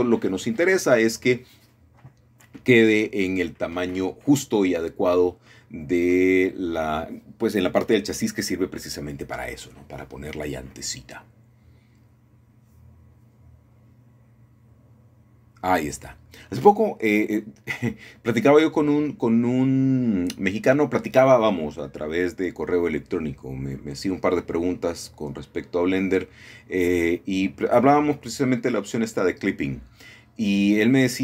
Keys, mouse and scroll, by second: 1.3 click, 1.7 s, 4.3-5.4 drag, 5.4-5.7 scroll down 1, 5.7-6.9 middle drag, 7.4-8.5 middle drag, 8.6 middle click, 9.5 KP_1, 11.2 g, 14.0 click, 15.3 shift+middle click, 19.4 click, 20.2 ctrl+KP_3, 21.9 g, 22.1 y, 23.7-25.0 shift+drag, 25.5 KP_1, 26.8-27.3 scroll up 1, 27.5 shift+middle click, 29.1 g.